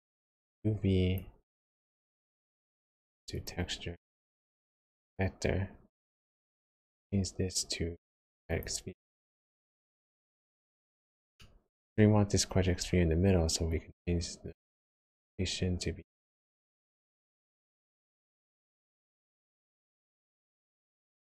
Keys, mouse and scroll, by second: 0.0 click, 2.0 click, 4.6 click, 6.4 click, 9.4 ctrl+shift+click, 9.8 click, 11.3 middle click, 12.2-12.9 scroll up 4, 12.9-13.6 scroll down 1, 13.6 click, 17.3 click, 17.8 click, 18.3 click, 18.6 click, 19.6 click, 20.6 click, 20.9 click, 21.0 click.